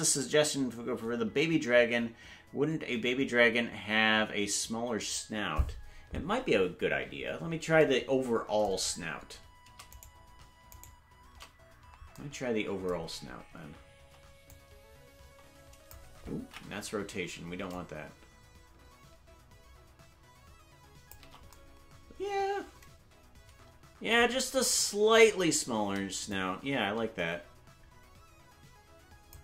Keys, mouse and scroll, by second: 7.0-7.4 scroll down 3, 8.7-10.1 scroll down 2, 10.1 right click, 10.1-10.9 scroll down 1, 10.9 shift+right click, 14.4-15.9 drag, 16.9 ctrl+z, 17.6-21.1 drag, 26.2-29.3 drag.